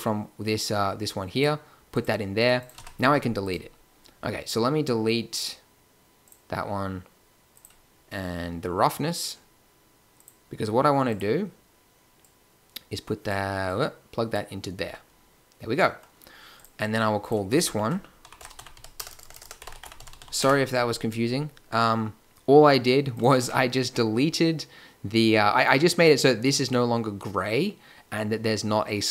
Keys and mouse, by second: 2.7 x, 14.8 a, 19.0 BackSpace, 19.2 BackSpace, 19.3 BackSpace, 20.2 s, 23.3 Tab.